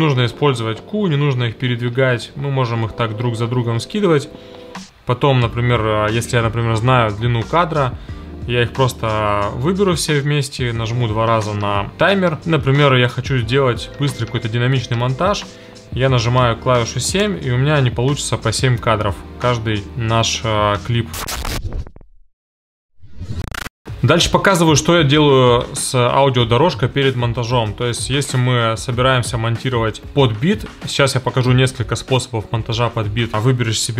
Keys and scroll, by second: 0.1 e, 2.2 e.